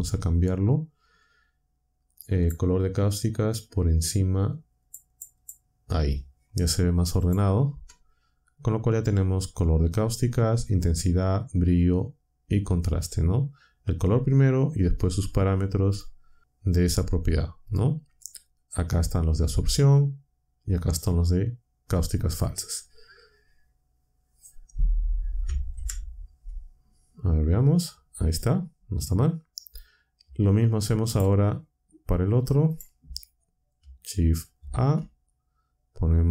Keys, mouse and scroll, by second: 2.3 click, 4.8 click, 7.1 click, 7.6 Tab, 25.7 ctrl+Down, 30.2 z, 31.0 click, 32.7 click, 34.5 shift+a.